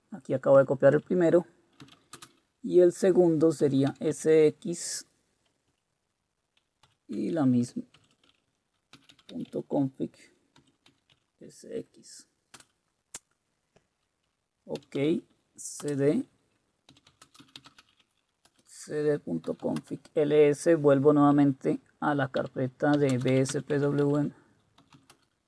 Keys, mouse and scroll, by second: 1.6-2.3 typing, 3.6-3.9 typing, 4.1 Tab, 6.6-11.1 typing, 12.5 typing, 14.5-20.1 typing, 22.7-25.3 typing, 24.0 Return.